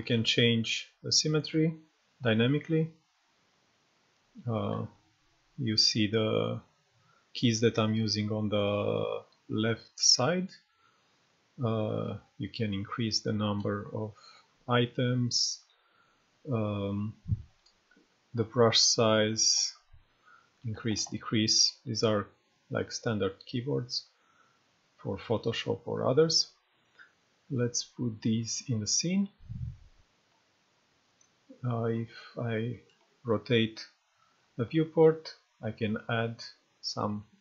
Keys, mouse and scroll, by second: 4.7 shift+z, 11.3 shift+[, 12.1 shift+], 14.2-15.0 [, 17.5-20.9 typing, 30.2 right click, 30.3-31.2 drag, 31.9-32.7 scroll up 1, 32.7 right click, 33.0-34.5 drag, 37.0-37.4 typing.